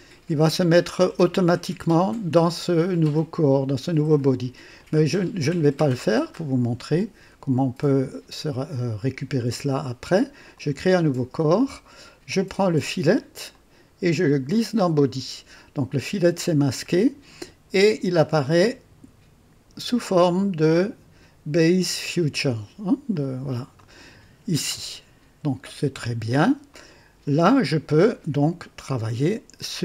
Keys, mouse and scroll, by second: 4.7 click, 10.5 click, 13.4-15.1 drag, 18.1-18.9 drag, 23.1 click, 23.7-26.1 drag, 26.6-28.0 drag.